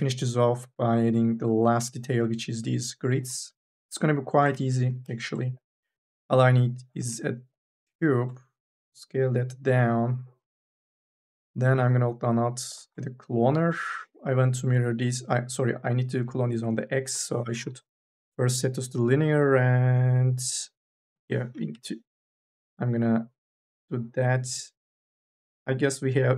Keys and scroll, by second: 4.7 4, 5.0 e, 21.5 Return.